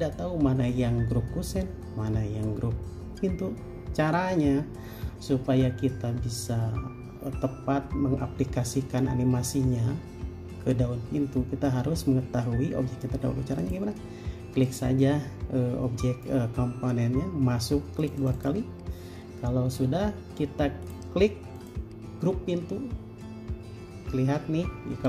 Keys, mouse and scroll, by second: 18.4 double click.